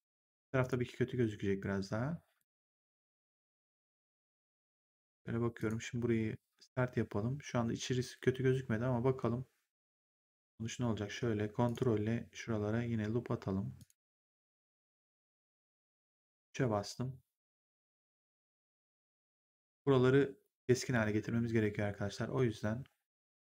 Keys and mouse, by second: 0.2 3, 0.5 click, 2.3 click, 3.9 click, 5.5 click, 5.8 1, 10.0 click, 11.6 ctrl+click, 13.7 ctrl+click, 15.9 3, 20.6 1.